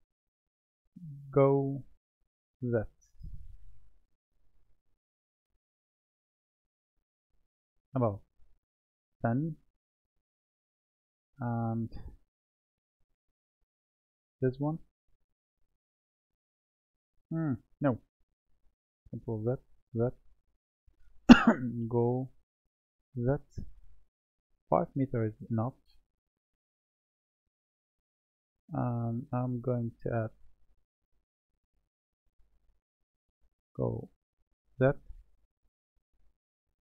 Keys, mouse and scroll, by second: 1.4 g, 7.8-10.4 drag, 12.2-13.6 middle drag, 13.6 click, 17.8-19.3 scroll down 1, 19.3 ctrl+z, 19.8 ctrl+z, 21.8 g, 25.4-27.8 drag, 28.8 click, 31.0 click, 33.7 g.